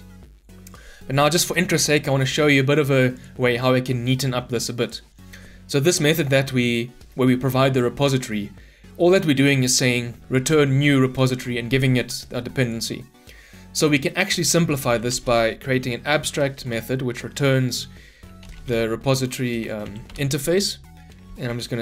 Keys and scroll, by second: 16.5 Return.